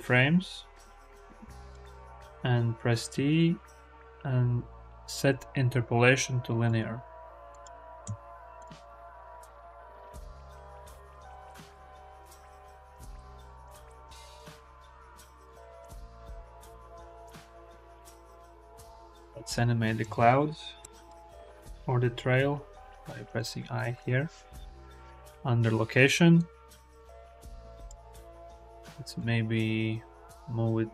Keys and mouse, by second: 2.8 t, 7.4 click, 7.8 space, 8.4 click, 11.7 click, 15.3 n, 15.9-16.3 shift+drag, 16.5 space, 19.0 ctrl+z, 19.0 click, 20.0 click, 22.2 i, 26.2-27.7 drag, 29.0-30.9 drag.